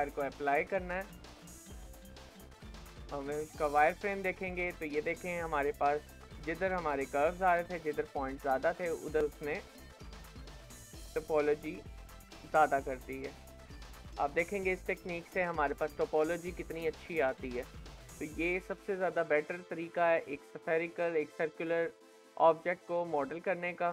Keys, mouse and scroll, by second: 1.1-3.7 middle drag, 3.7 click, 4.3 shift+middle click, 4.7 alt+z, 5.1 middle click, 6.0 KP_1, 7.7-8.1 scroll up 2, 8.1 shift+middle click, 8.9 shift+middle click, 9.3 scroll down 2, 9.7-12.2 middle drag, 12.2-13.0 scroll up 2, 13.0 scroll down 1, 13.3-16.2 shift+middle drag, 16.2-18.4 scroll down 3, 18.4 scroll down 2, 18.4 shift+middle click, 19.2-19.5 scroll up 2, 19.5-21.5 shift+middle drag, 21.5-23.9 middle drag.